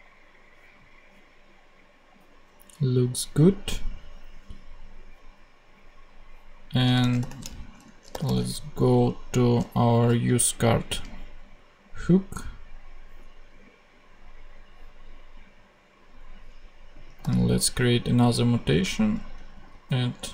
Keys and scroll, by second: 7.1 shift+super+o, 8.0 shift+super+u, 8.1-9.8 typing, 18.9 shift+a, 19.5 shift+d.